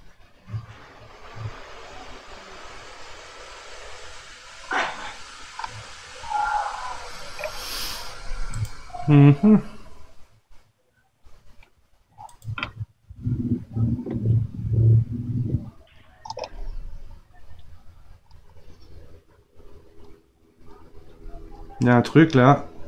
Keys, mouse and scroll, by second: 8.5-11.5 drag, 12.3 click.